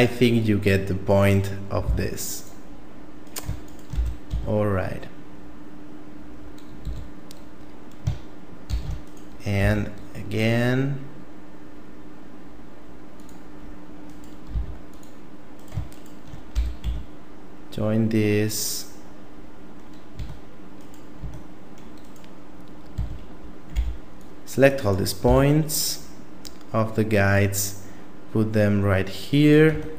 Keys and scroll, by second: 1.9 x, 4.0 f, 4.3 a, 6.9 a, 8.7 shift+d, 9.6 s, 14.5 x, 16.5 f, 16.9 a, 20.1 Tab, 21.2 Tab, 22.9 a, 23.7 b, 25.3 s, 29.7 Tab.